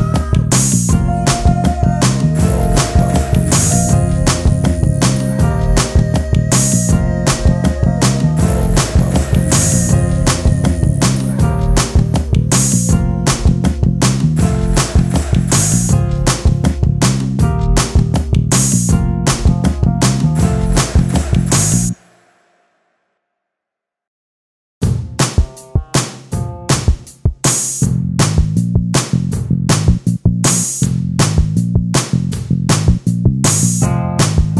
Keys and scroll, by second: 10.3 alt+space.